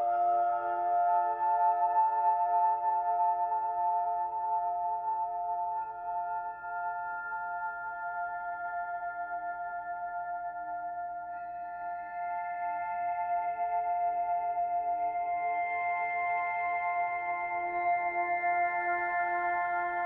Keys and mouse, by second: 0.7-2.6 alt+drag, 2.9 Tab, 3.8-5.0 alt+drag, 6.2 alt+click, 6.9 KP_Divide, 8.2-9.2 alt+drag, 11.3-12.0 alt+drag, 12.3-12.7 alt+shift+drag, 12.9-16.9 alt+shift+drag, 16.7 Tab, 17.3-19.5 alt+drag, 19.8-20.0 drag.